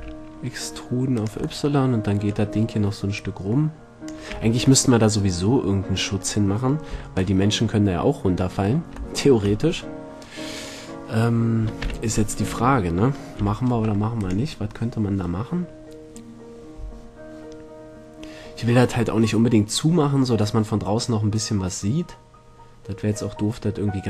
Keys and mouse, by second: 1.4 click, 1.9 click, 2.0 middle click, 2.4 click, 2.8 click, 4.5 a, 5.2 middle click, 7.1 z, 12.0 z, 12.7 Tab, 13.6 z.